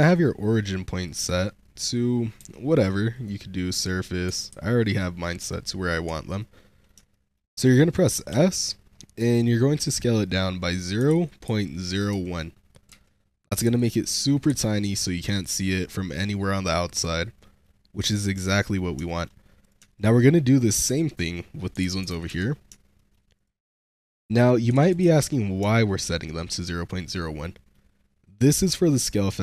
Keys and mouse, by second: 2.3 q, 4.5 ctrl+z, 5.3 click, 6.3-6.7 shift+drag, 7.0 shift+click, 8.2 s, 10.9 0, 11.2 ., 11.3 0, 12.0 1, 12.8 Return, 13.5 /, 14.4 /, 15.3-17.5 drag, 18.4 drag, 18.9 shift+drag, 19.5 click, 19.8 shift+drag, 20.8-22.2 typing, 22.2 Return, 22.9 shift+drag, 22.9 shift+middle click, 23.2 click, 23.8 s, 24.6 0, 24.8 ., 25.1 Return, 25.1 1, 25.8-26.3 shift+middle drag, 26.3 click, 27.1-27.6 drag.